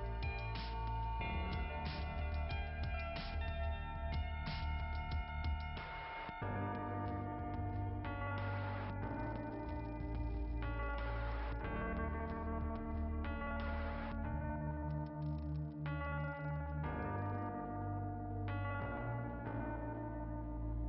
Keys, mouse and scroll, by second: 2.7 click, 5.6 click, 17.1 click, 17.7 click, 17.9 click.